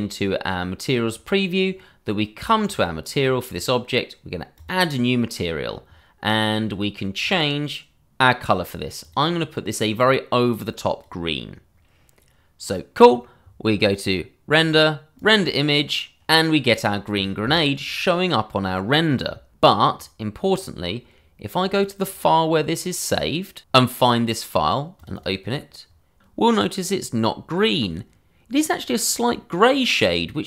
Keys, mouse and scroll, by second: 2.6 click, 6.1-6.8 scroll, 6.8 click, 9.0 click, 14.6 click, 23.8 click, 25.0 click, 25.2 double click.